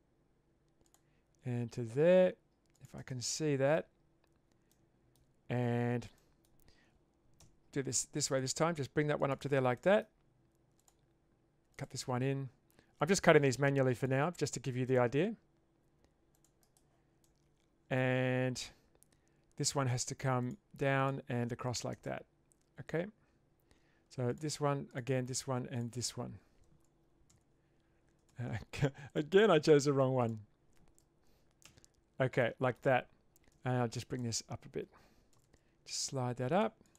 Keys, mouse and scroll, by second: 3.3 middle click, 4.8 middle click, 6.2 middle click, 7.4 k, 9.8-22.0 middle drag, 24.3 click, 25.8 shift+click, 27.3 ctrl+x, 28.3 ctrl+z, 30.3 shift+click, 31.7 ctrl+x, 32.4 middle click, 33.5 1, 35.3 g.